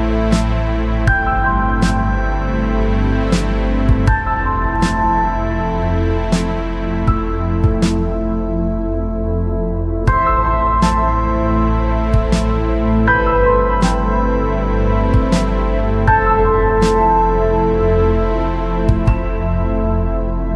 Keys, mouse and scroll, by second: 1.1 Tab, 7.4-14.3 middle drag, 15.0-17.6 middle drag, 18.9 Tab.